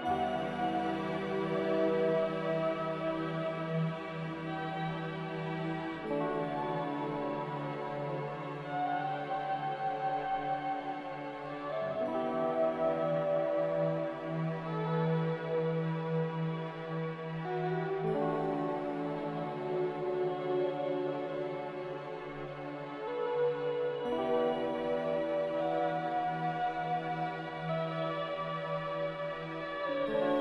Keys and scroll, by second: 3.4 a, 4.3 b, 6.5-8.0 typing, 10.0 5, 14.6 b, 17.1 ctrl+z, 20.4 0, 23.5 q, 25.6 b, 27.4 ctrl+b.